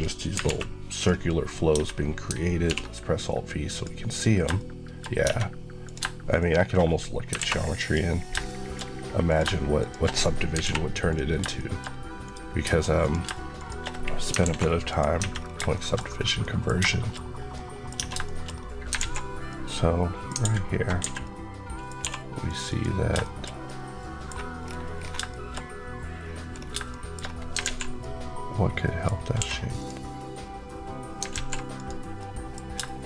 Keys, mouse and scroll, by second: 0.3 alt+m, 0.8 click, 1.6 alt+Tab, 2.5 alt+v, 3.6 click, 4.4 shift+middle click, 5.0 scroll up 1, 5.1 Tab, 5.7 click, 5.9 shift+click, 6.7 click, 7.2 alt+m, 7.7 click, 8.4 shift+middle click, 9.1 click, 9.3 shift+click, 10.4 shift+click, 10.5 alt+shift+m, 11.0 click, 11.3 shift+click, 11.4 middle click, 12.1 click, 13.4 click, 14.3 alt+m, 14.8 click, 15.1 Tab, 15.3 scroll down 2, 15.6 shift+middle click, 15.9-16.3 scroll up 1, 16.3 middle click, 17.8 middle click, 17.9 Tab, 18.2 shift+middle click, 18.4 scroll up 1, 18.9 alt+z, 19.4 middle click, 20.3 alt+a, 21.1 middle click, 21.9 2, 22.3 click, 23.1 shift+middle click, 23.5 middle click, 24.5 scroll down 1, 25.2 shift+middle click, 26.1 scroll up 1, 26.6 shift+scroll up 1, 26.8 shift+middle click, 27.4 alt+scroll up 1, 27.5 alt+z, 27.9 middle click, 29.3 q, 29.6 click, 31.2 alt+z, 31.6 click, 32.0 middle click, 32.9 shift+click.